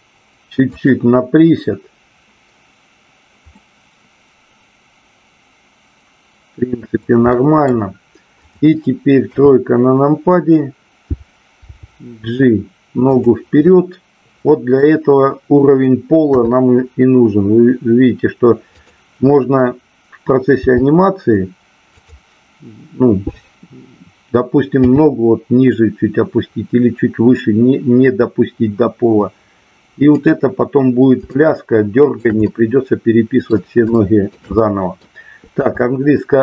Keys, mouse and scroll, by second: 0.7 click, 3.5-7.1 middle drag, 7.3 scroll up 1, 7.5 middle click, 9.2 KP_3, 11.7 g, 13.1 click, 13.6 scroll up 1, 13.7 middle click, 16.2 KP_3, 18.7 click, 22.0 click, 30.1 click, 31.2-32.1 shift+middle drag, 32.3-33.5 middle drag, 33.9 shift+middle drag, 34.6 middle click.